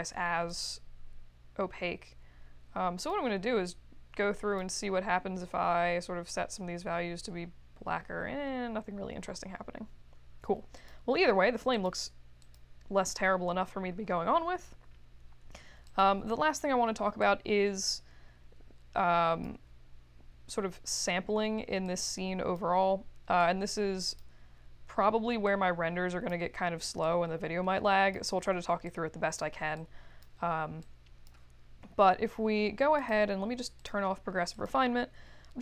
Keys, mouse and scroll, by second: 0.5-3.1 drag, 3.6-4.5 drag, 10.7 click, 11.7 click, 12.3 click, 17.2-19.4 drag, 21.8-22.5 drag, 23.4-24.1 drag, 25.4-26.3 drag, 27.0-28.1 drag, 28.8 click, 29.7 click, 30.8 click, 32.9 click, 33.7 click, 34.5 click.